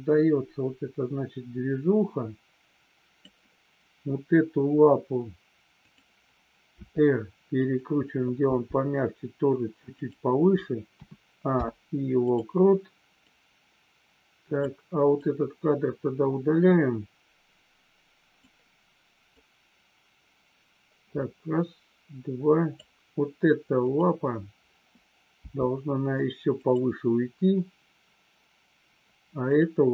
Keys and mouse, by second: 5.7 click, 6.6 r, 8.4 g, 10.9 a, 11.4 i, 13.3 click, 15.1 click, 19.4 click, 26.6 click, 29.4 click.